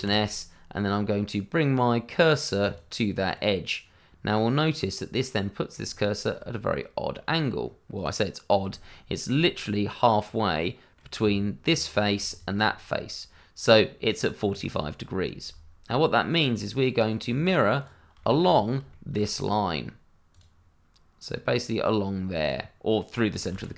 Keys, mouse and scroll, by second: 2.6 click, 3.3 middle click, 6.1 shift+middle click, 7.9 click, 8.4 scroll up 1, 9.1 shift+middle click, 9.1 middle click, 11.2 Tab, 12.3 shift+click, 12.6 scroll down 1, 13.3 middle click, 14.4-15.0 scroll down 1, 15.0 scroll up 1, 15.9 middle click, 17.7 click, 18.2 shift+middle click, 18.2 middle click, 18.4 scroll up 1, 18.9 shift+middle click, 20.3 click, 23.5 ctrl+z.